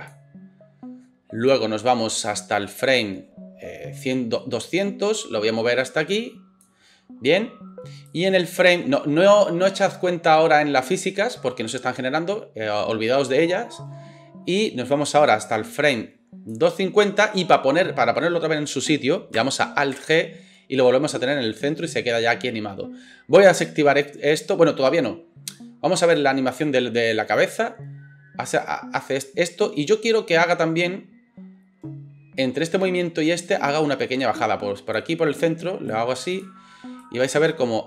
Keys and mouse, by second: 20.0 alt+g.